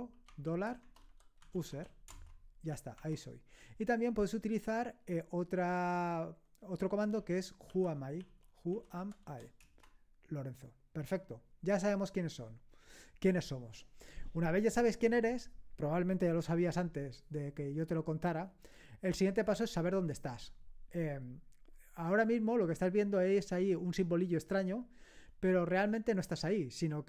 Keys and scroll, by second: 0.0-3.5 typing, 0.8 Caps_Lock, 7.1-9.8 typing.